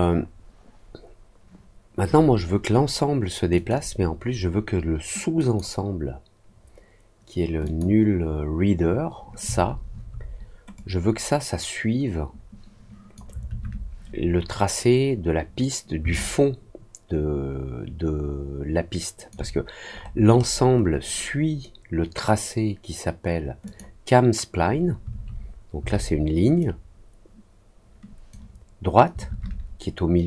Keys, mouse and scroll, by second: 3.5 click, 5.3 click, 7.6 click, 10.7-13.1 drag, 16.1-19.2 alt+drag, 19.9-20.8 scroll up 3, 23.6 click, 26.5-28.2 drag.